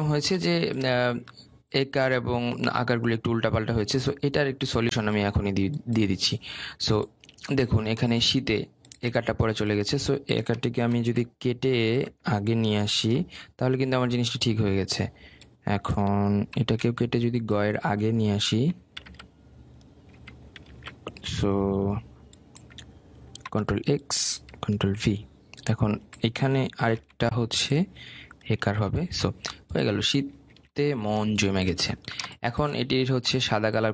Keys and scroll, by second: 11.5 ctrl+x, 13.6 ctrl+v, 17.2 ctrl+x, 19.1 ctrl+c, 19.6 ctrl+v, 24.1 ctrl+x, 25.5 ctrl+v, 27.5 ctrl+c, 29.3 ctrl+v.